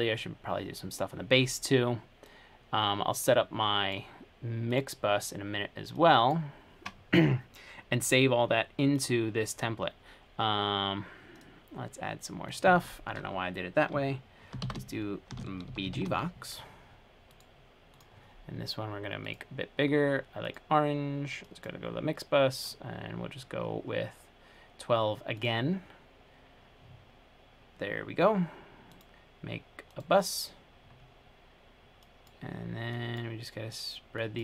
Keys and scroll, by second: 14.8-16.6 typing.